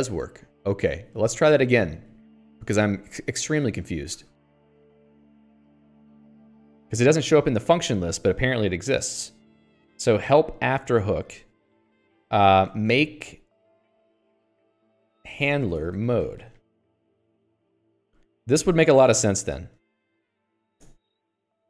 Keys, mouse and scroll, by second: 0.3 click, 1.4 Escape, 1.9 k, 2.1 k, 2.8 shift+i, 3.2 Escape, 4.0 ctrl+l, 5.0-7.4 typing, 8.2 ctrl+s, 8.5-9.9 l, 10.3 j, 11.5-21.0 typing, 15.2 Escape, 21.0 ctrl+s, 21.3 Escape.